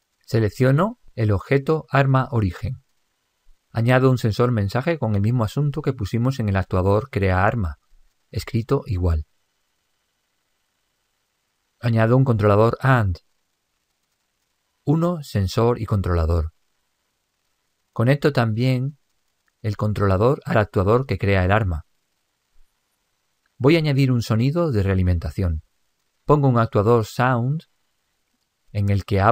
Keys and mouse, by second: 1.1 click, 5.9 click, 7.0-8.8 middle drag, 8.1 click, 14.5-18.1 drag, 18.4 click, 21.7 click, 25.3-28.3 drag.